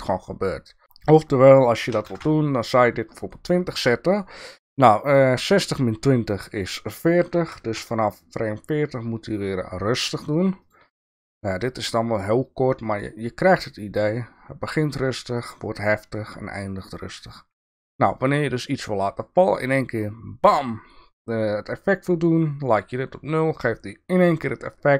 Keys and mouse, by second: 6.6-11.4 drag.